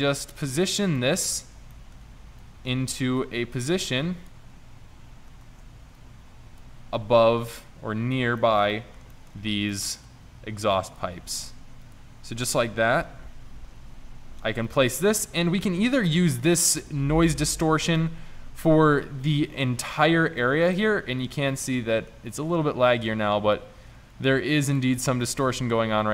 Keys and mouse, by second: 0.0 middle click, 1.0-1.8 middle drag, 1.8 middle click, 5.5 shift+Tab, 6.0 shift+Tab, 8.4 middle click, 9.8 middle click, 10.5 s, 11.2 g, 13.7 r, 18.4 shift+z.